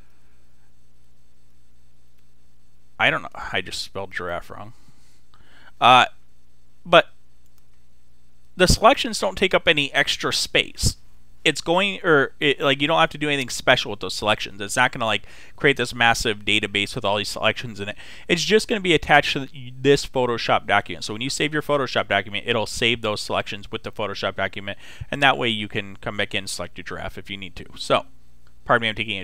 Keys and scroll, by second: 0.0 r, 1.2-4.3 typing.